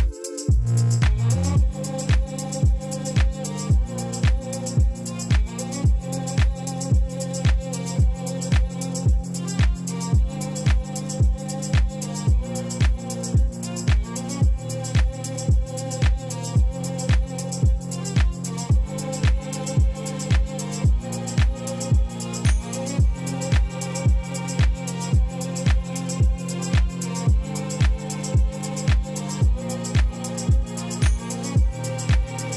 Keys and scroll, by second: 2.0-3.6 typing, 4.2 Return, 10.6 e, 11.9 ., 12.2 2, 13.2 Return, 14.7 ctrl++, 15.5 p, 19.5-20.3 typing, 20.9 Return, 25.6 e, 27.3 ., 27.5 2, 27.9 Return, 28.5 ctrl++, 29.3 p.